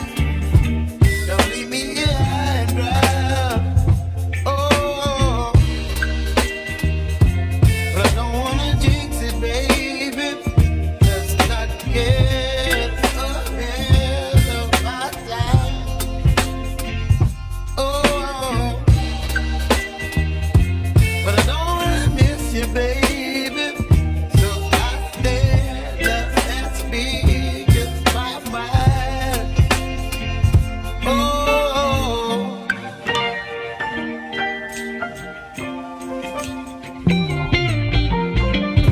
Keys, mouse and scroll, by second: 5.4-7.6 drag, 7.6 Tab, 8.5-11.0 middle drag, 11.0-11.5 scroll up 3, 11.5-14.0 shift+middle drag, 14.7 3, 14.9 click, 18.3-18.9 scroll down 1, 18.9-19.3 scroll up 1, 21.4 g, 26.3 click, 26.5 click, 27.6 2, 28.1 click, 29.0 alt+click, 35.0 g, 37.7 shift+middle click, 38.1-38.9 scroll down 1.